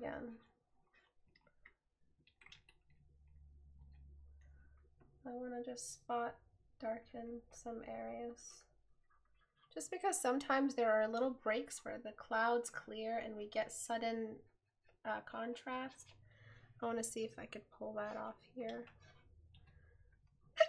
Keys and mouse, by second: 3.8 right click.